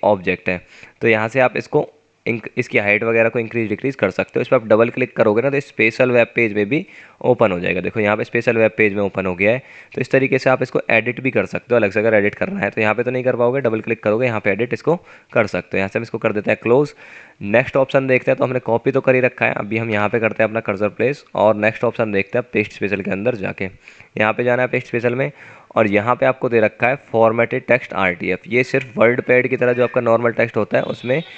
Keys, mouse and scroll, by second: 7.2 double click, 14.1 double click, 20.3 Return, 20.5 Return.